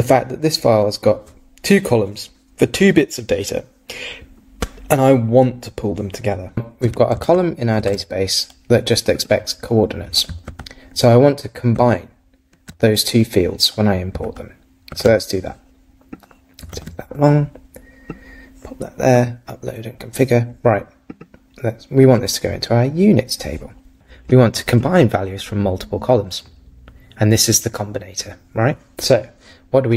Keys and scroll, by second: 7.3 super+Tab, 10.5 super+Tab, 14.3 super+Tab, 16.7 super+Tab.